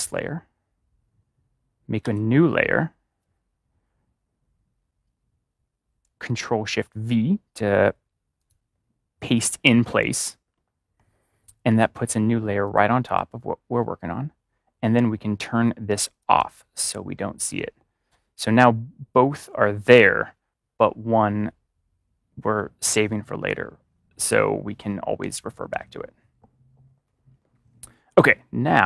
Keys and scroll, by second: 6.6 ctrl+shift+v, 25.5 ctrl+=.